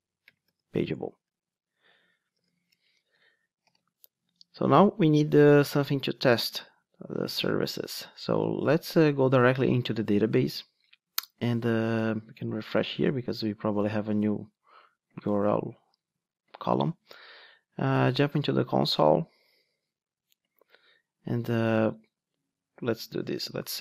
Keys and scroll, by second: 3.6 Return, 3.6 alt+super+l, 12.8 super+r, 18.5 shift+super+F10.